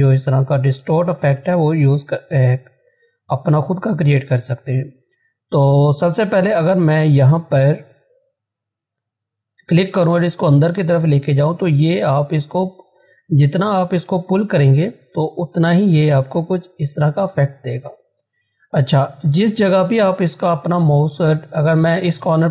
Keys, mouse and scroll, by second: 9.9-19.6 drag, 19.6 ctrl+z, 22.4-22.5 drag.